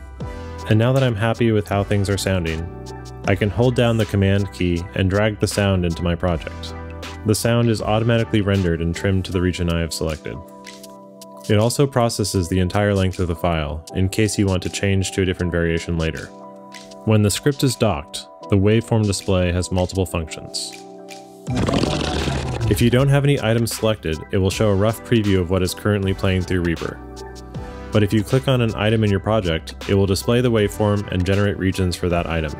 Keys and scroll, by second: 21.2 space, 26.3 space.